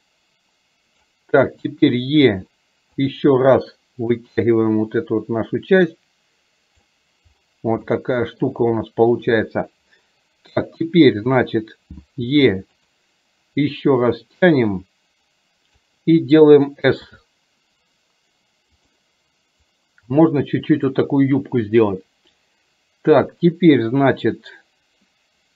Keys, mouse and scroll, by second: 4.4-6.9 drag, 7.9 shift+middle click, 14.4 click, 14.8-15.8 drag, 19.9-21.0 drag.